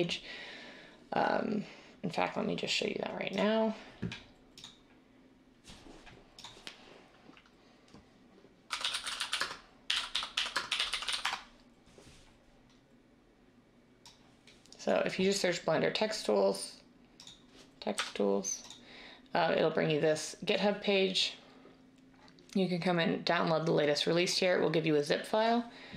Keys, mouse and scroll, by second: 8.6-11.6 typing.